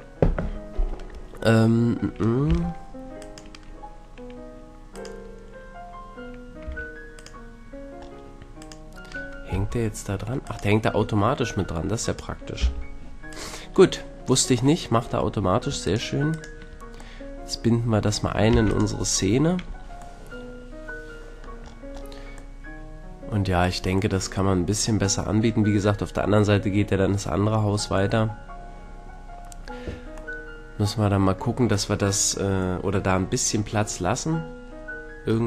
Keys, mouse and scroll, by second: 1.3-3.3 middle drag, 2.5 g, 3.3-6.8 right drag, 6.7 a, 7.1-8.3 middle drag, 9.5 g, 12.6 g, 15.9 middle click, 16.4-17.3 drag, 17.3 middle click, 17.5-17.9 middle drag, 18.0 click, 18.2 middle click, 18.5 ctrl+s, 20.3-20.7 middle drag, 21.7 middle click, 22.0-25.9 middle drag, 30.4-34.9 middle drag, 35.3-35.4 scroll up 1.